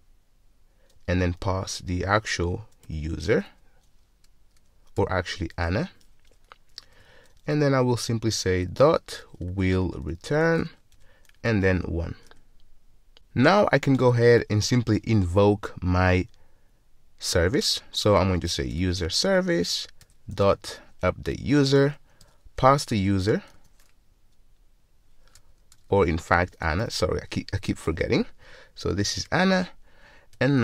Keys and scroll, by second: 6.3 Return, 11.0 Return, 19.3 Return, 27.9 Return.